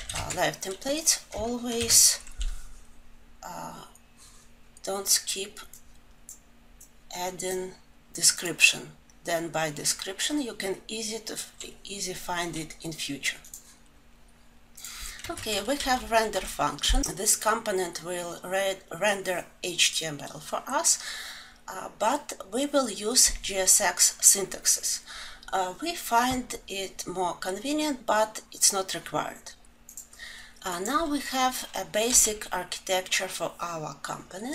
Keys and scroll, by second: 13.2 ctrl+alt+s.